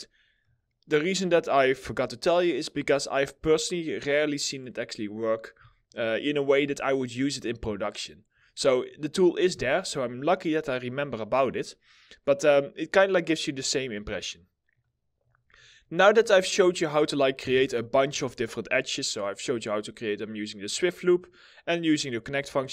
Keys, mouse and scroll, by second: 5.8 alt+middle click, 9.1 ctrl+z, 11.5-12.7 scroll down 1, 12.7 middle click, 15.1 middle click, 15.4 alt+middle click, 16.3 scroll up 1, 17.1 2, 18.0 alt+middle click, 18.7 alt+middle click, 22.6 middle click.